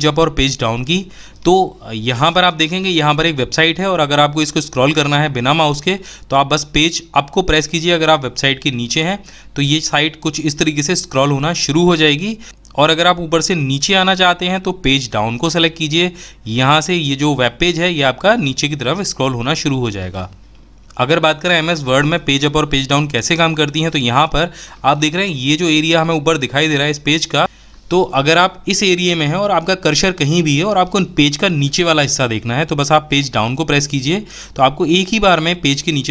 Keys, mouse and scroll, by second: 0.1 Page_Down, 14.6 Page_Down, 32.7 Page_Down.